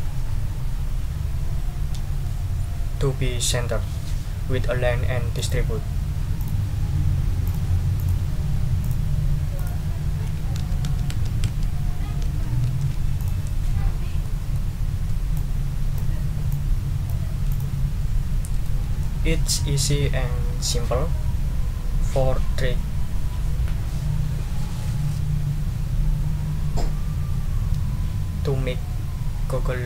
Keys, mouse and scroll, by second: 5.3 click, 6.4 click, 7.4 click, 8.0 click, 8.8 click, 9.6 click, 10.6 shift+Down, 12.2 shift+Down, 13.2 shift+click, 13.9 ctrl+scroll down 2, 14.2 ctrl+middle click, 14.8 ctrl+scroll up 2, 15.3 ctrl+click, 16.5 click, 17.5 click, 18.6 ctrl+click, 19.8 ctrl+click, 20.2-20.9 ctrl+scroll up 1.